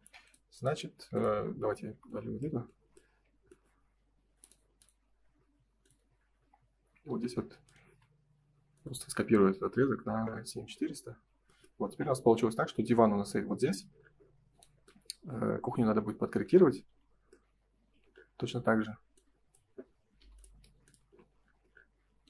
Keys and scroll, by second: 0.9 Escape, 10.2 Return, 11.0 space, 11.2 Escape, 12.2 ctrl+s, 16.8 F3, 21.0 space.